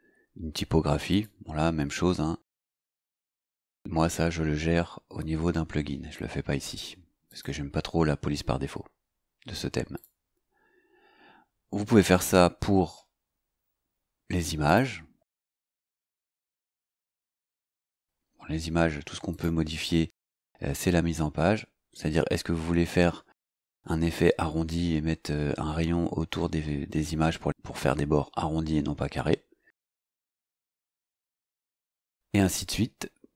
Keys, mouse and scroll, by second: 1.1 click, 7.3 click, 9.9 click, 13.7 scroll down 2, 14.7 click, 16.5 click, 19.3 click, 29.7 click, 31.0 click, 32.4-32.8 scroll down 2.